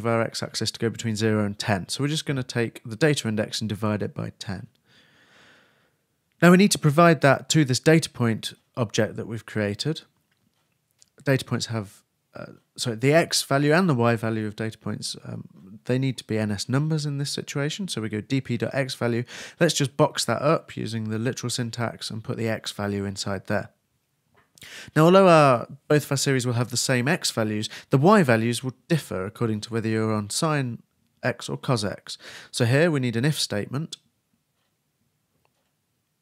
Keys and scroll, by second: 17.2 shift+space, 17.5 shift+2, 18.6 shift+9, 21.4-23.0 typing, 22.0 shift+Return, 32.9-33.9 typing, 35.1 shift+f, 35.6 shift+s.